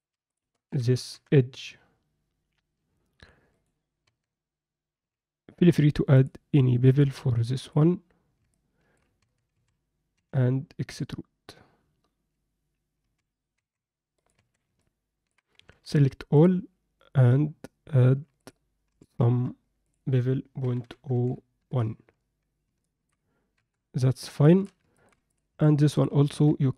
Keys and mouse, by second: 0.3 shift+click, 0.7 s, 4.1 Tab, 4.9 z, 6.9-7.7 drag, 8.5-8.9 middle drag, 9.2 Tab, 9.5 a, 10.1 e, 14.3 Tab, 14.8 alt+click, 15.1 alt+middle click, 15.8 ctrl+a, 18.4 click, 19.9-21.6 drag, 22.8 alt+middle click, 23.5 KP_7, 24.4 shift+middle drag, 24.9 ctrl+middle click, 25.3 drag, 25.8 alt+middle click, 26.3 Tab.